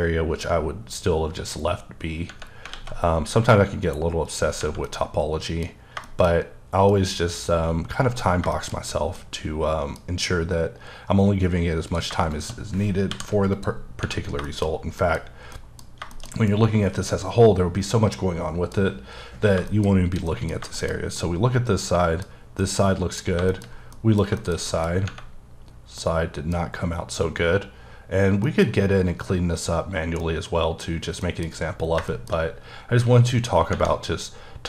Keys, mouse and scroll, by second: 2.7 alt+x, 4.3 click, 4.7 scroll up 1, 4.8 middle click, 5.6-6.0 scroll down 2, 6.0 shift+middle click, 8.7-9.1 scroll up 3, 9.1 middle click, 10.0-11.9 scroll up 4, 12.1 shift+click, 13.1 m, 13.5 click, 14.0-15.5 scroll down 7, 14.5 shift+middle click, 15.0 middle click, 15.5 middle click, 16.1 shift+middle click, 16.3 shift+scroll down 1, 16.5 middle click, 18.9-20.0 scroll up 9, 19.7 middle click, 20.3 middle click, 20.7 shift+middle click, 21.0 scroll down 1, 21.2 middle click, 22.6 middle click, 23.2 scroll down 2, 23.5 shift+middle click, 24.8 scroll up 2, 26.0 middle click, 27.7-28.4 scroll down 2, 28.4 middle click, 28.7-29.5 scroll up 1, 29.7-30.2 scroll down 1, 30.2 middle click, 30.9-31.2 scroll down 1, 31.2 middle click, 31.5-32.1 scroll up 3, 32.1 shift+middle click.